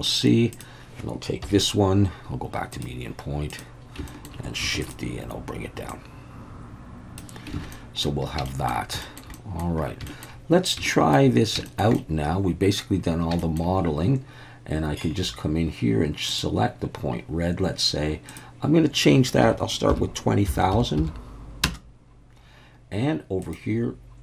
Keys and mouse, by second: 1.4 KP_1, 2.7-3.6 drag, 4.1 shift+middle click, 4.8 shift+d, 4.8 click, 5.9-7.2 drag, 7.7 alt+a, 7.7-8.1 middle drag, 8.5 shift+middle drag, 9.0 shift+middle click, 9.3 middle click, 10.1 shift+middle click, 10.9 shift+middle drag, 11.7 shift+middle click, 11.9-12.8 middle drag, 13.4 shift+middle click, 16.3 click, 18.4-22.3 drag, 20.7 0, 23.5-24.2 drag.